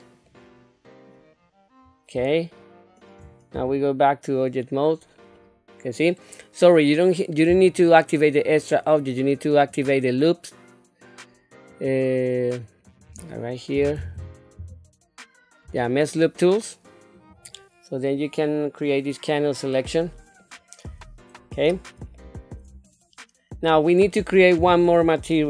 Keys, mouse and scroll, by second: 0.3 middle click, 1.4 scroll down 1, 2.4 shift+middle click, 3.5 Tab, 4.9 scroll down 2, 5.3 middle click, 6.3 middle click, 8.4-10.0 drag, 19.9 middle click, 20.9 Tab, 21.3 scroll up 2, 22.1 shift+middle click, 22.8 middle click.